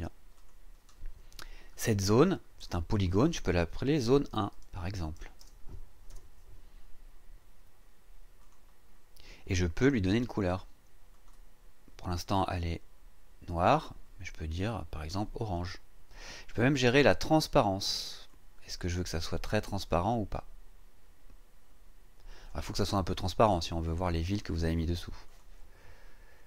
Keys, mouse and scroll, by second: 0.3 click, 4.0-6.1 typing, 8.4 click, 11.1 click, 15.1 click, 18.2-22.7 drag, 25.2 click.